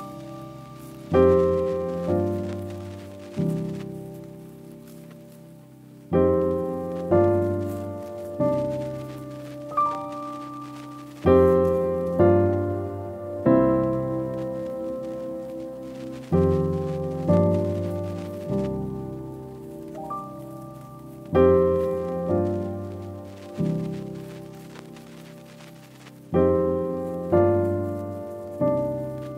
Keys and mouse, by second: 0.3-0.9 drag, 2.0 click, 2.5 click, 9.1-10.2 drag, 10.8 click, 11.8 click, 13.6 click, 14.7 F12, 15.2 =, 16.1 space, 16.6 =, 17.2 space, 28.4 F12.